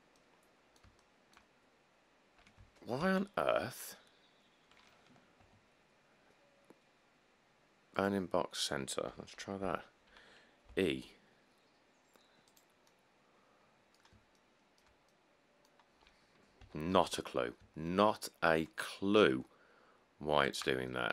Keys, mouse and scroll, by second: 3.2 ctrl+z, 5.6 middle click, 9.8 7, 10.9 e, 16.8 g, 17.2 z.